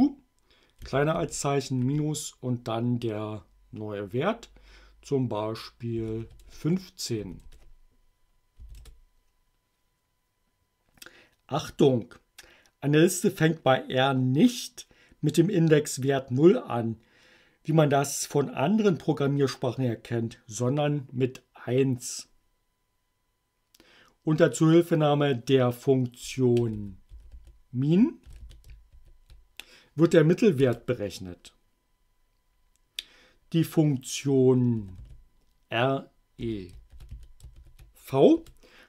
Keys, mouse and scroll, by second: 0.8 <, 1.2 -, 6.0 1, 6.3 5, 6.5 Return, 7.3 s, 7.5 Return, 8.7 a, 8.8 Return, 26.3-29.0 typing, 30.7 Return, 34.6-38.1 typing, 38.4 Return.